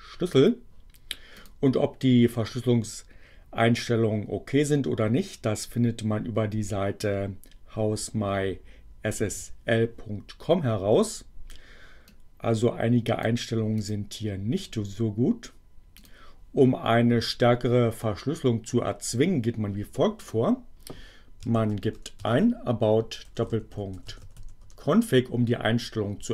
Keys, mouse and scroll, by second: 0.3 click, 1.3 click, 12.1-13.4 drag, 13.7 click, 15.9 click, 20.2 click, 21.2-24.9 typing.